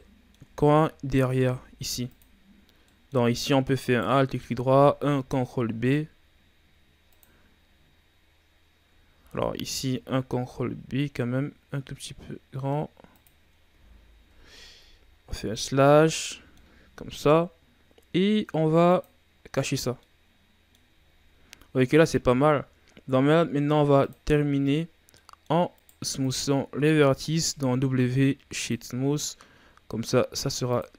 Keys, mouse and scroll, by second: 0.5 Tab, 1.2 ctrl+Tab, 2.8-3.8 middle drag, 3.8 alt+right click, 5.5 ctrl+b, 9.3 ctrl+z, 10.4 ctrl+b, 13.9 Tab, 14.0-14.8 scroll down 1, 14.8 KP_Divide, 15.2 z, 16.0-18.8 middle drag, 18.8 click, 19.6-20.0 scroll down 2, 20.0-21.0 middle drag, 21.0-21.5 ctrl+scroll up 4, 21.5-22.4 scroll down 5, 22.4-24.0 scroll up 6, 24.0 click, 24.8 scroll up 2, 25.1 middle click, 25.7 right click, 26.2 right click, 27.3 w, 30.7 click.